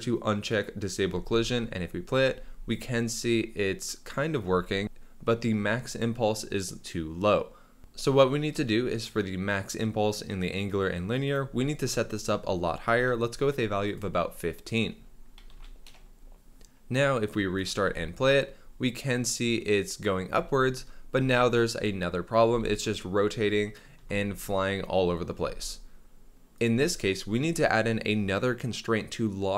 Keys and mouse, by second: 0.5 click, 1.1 space, 2.3 space, 2.7 middle click, 11.3-13.9 drag, 14.7-15.9 drag, 17.5 click, 17.8 space, 20.3 space, 23.7 space, 25.4 space.